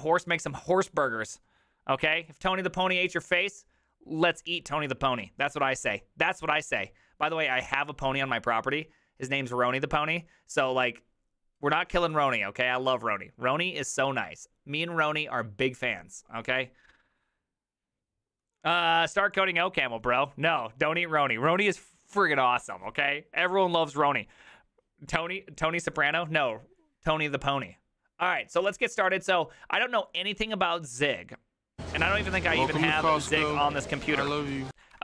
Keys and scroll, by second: 32.4 alt+{, 32.6 ctrl+c, 32.7-34.7 typing, 34.9 ctrl+c.